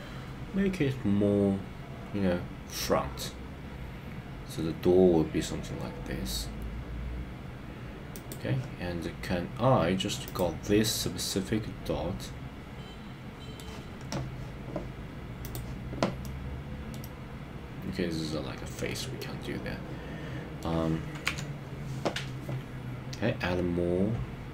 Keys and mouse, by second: 8.1 click, 10.3 click, 11.0-13.6 middle drag, 16.2 middle click, 17.0-18.8 middle drag, 19.2-20.6 middle drag, 21.3 KP_3.